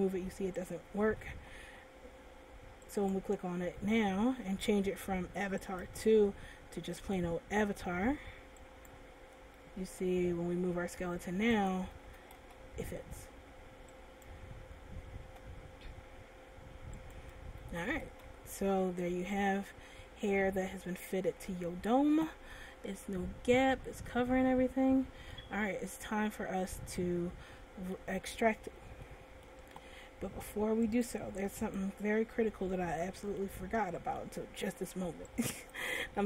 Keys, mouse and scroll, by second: 2.5 ctrl+z, 3.4 right click, 5.7 click, 9.6 right click, 10.4 r, 12.4 a, 12.9 alt+r, 14.9 right click, 15.7 r, 17.8 click, 18.0 a, 18.6 alt+r, 19.2 middle click, 22.7 middle click, 26.7 middle click, 29.2 middle click, 31.1 click, 32.9 middle click, 35.5 click.